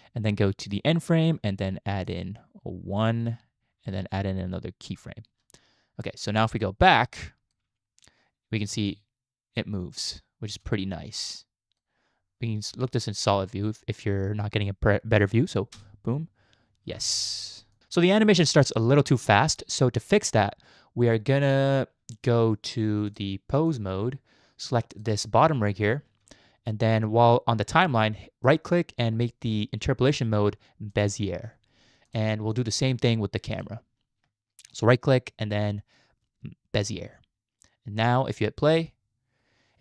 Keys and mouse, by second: 0.7 click, 2.1 click, 4.9 click, 6.3-7.5 drag, 8.6 space, 10.5 space, 10.7-11.8 drag, 12.7 z, 15.7 space, 16.9 space, 17.7 click, 21.5 click, 23.2-23.7 drag, 24.9 click, 28.6 right click, 32.1-32.6 drag, 33.6 click, 34.7-35.8 right drag, 35.8-36.9 drag, 38.7 space.